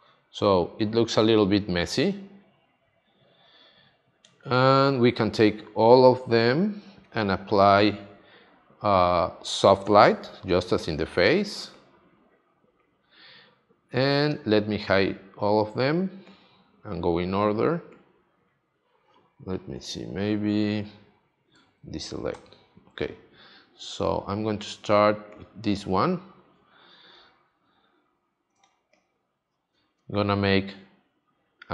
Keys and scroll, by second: 22.3 super+d, 28.5 space.